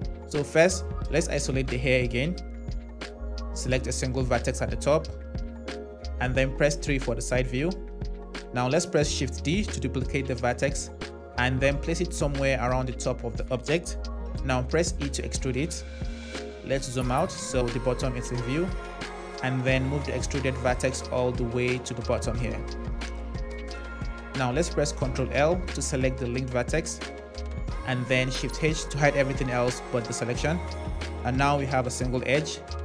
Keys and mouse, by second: 3.7 click, 6.0 KP_3, 9.1 shift+d, 12.7 click, 14.3 e, 19.2 g, 21.3 click, 22.7 g, 25.6 ctrl+l, 28.4 shift+h.